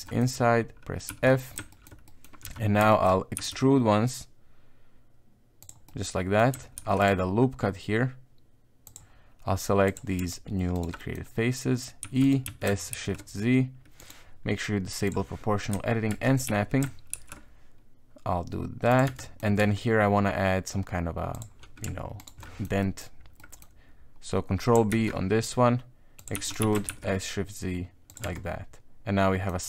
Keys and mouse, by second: 0.0 middle click, 1.1 f, 1.3 middle click, 1.7 shift+middle click, 2.0 middle click, 2.4 KP_1, 2.9 shift+middle click, 3.3 e, 5.9 middle click, 6.7 ctrl+r, 9.8 click, 10.7 alt+right click, 11.0 middle click, 12.0 e, 12.4 s, 15.0 click, 16.1 shift+Tab, 16.4 s, 19.0 Tab, 19.2 middle click, 19.6 Tab, 21.3 click, 22.2 alt+right click, 22.4 middle click, 22.8 middle click, 23.4 middle click, 24.9 ctrl+b, 26.3 e, 26.6 s, 28.2 Tab, 28.3 middle click, 29.1 middle click, 29.3 middle click.